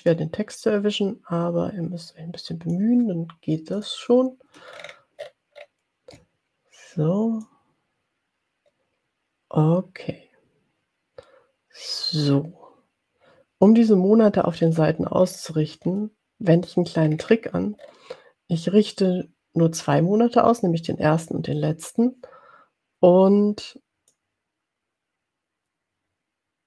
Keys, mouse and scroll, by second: 0.2-3.3 drag, 3.7 click, 4.8-5.3 ctrl+scroll up 2, 5.3 ctrl+scroll up 1, 7.5-13.9 drag, 14.6-15.0 ctrl+scroll down 1, 15.5-16.1 ctrl+scroll down 3, 17.1-18.1 ctrl+scroll up 5, 24.1-26.6 drag.